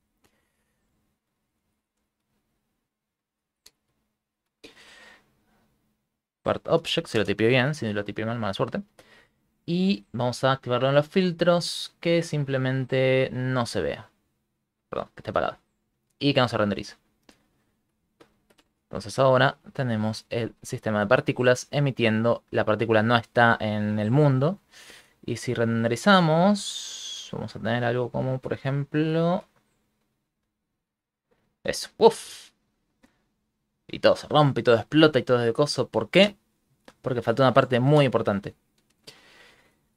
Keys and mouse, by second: 0.6 BackSpace, 1.1 BackSpace, 9.9 click, 13.4 click, 14.3 click, 14.6 click, 16.4 click, 17.6 shift+middle click, 18.1 shift+middle click, 18.3 middle click, 18.6 space, 19.1 ctrl+middle click, 19.7 shift+middle click, 22.3 middle click, 23.1 click, 24.4 middle click, 25.0 shift+space, 25.8 ctrl+middle click, 26.3 shift+middle click, 27.3 ctrl+space, 28.2 ctrl+middle click.